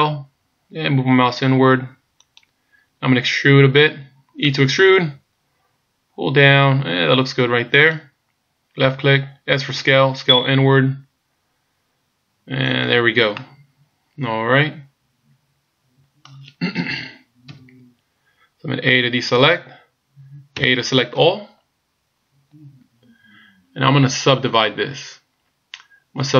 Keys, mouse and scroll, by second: 0.0 s, 4.5 e, 9.9 s, 13.4 middle click, 17.5 KP_1, 19.3 a, 20.6 a.